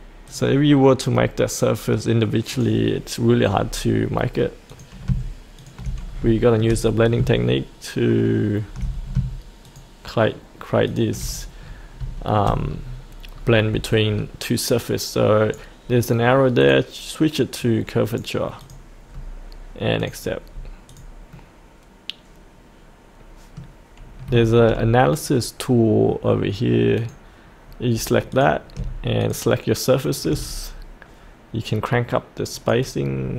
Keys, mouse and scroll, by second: 0.3-1.3 drag, 3.5-4.7 scroll down 1, 4.7 click, 5.6 ctrl+click, 6.4 shift+middle click, 6.9-7.2 scroll down 1, 8.8 scroll down 1, 9.7 ctrl+click, 10.9 ctrl+click, 11.3-11.6 scroll up 1, 12.2 shift+middle click, 12.8-13.3 scroll up 1, 14.9 right click, 16.6 click, 17.6 right click, 18.6 click, 19.1-20.0 scroll up 1, 20.0 click, 20.5-20.9 scroll up 1, 20.9 click, 21.3-23.7 middle drag, 27.0 click, 29.2 ctrl+click, 30.0 ctrl+click, 30.5-32.5 scroll down 1, 32.5-33.3 drag.